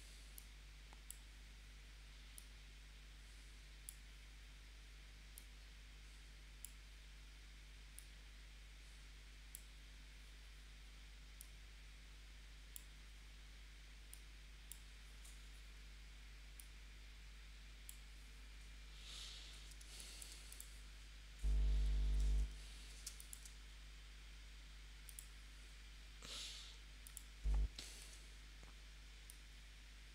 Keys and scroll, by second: 19.8 space, 22.0 p, 23.0 space, 28.0 shift+c.